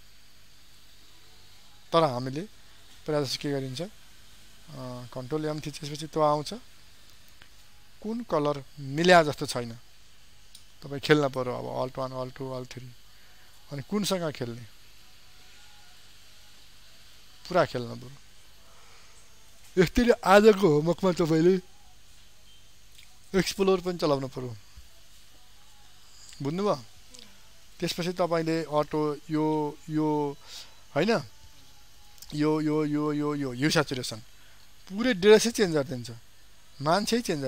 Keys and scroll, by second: 5.3 ctrl+m.